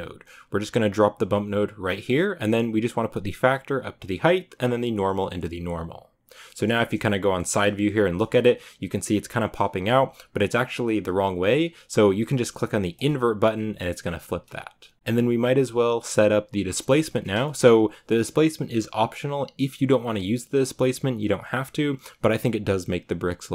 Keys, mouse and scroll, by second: 1.9-6.3 drag, 6.3-6.9 middle drag, 6.9 scroll up 4, 7.2-8.2 shift+middle drag, 8.2 scroll up 2, 12.8 click, 14.9-17.0 scroll down 2, 17.0 right click, 17.3-21.7 shift+middle drag, 21.7 scroll down 1.